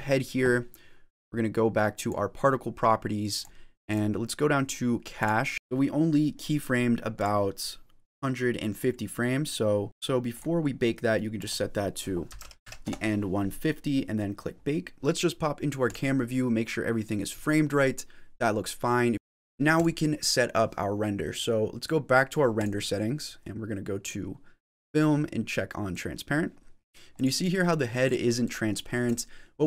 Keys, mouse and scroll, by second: 0.0 click, 1.8 click, 3.2 click, 3.8 click, 5.0 click, 7.1 click, 9.8 click, 10.5 click, 11.3 click, 15.7 click, 19.6 click, 22.4 click, 23.9 click, 24.6 click, 25.8 click, 27.0 click, 27.9 click, 28.3 click, 28.9 click.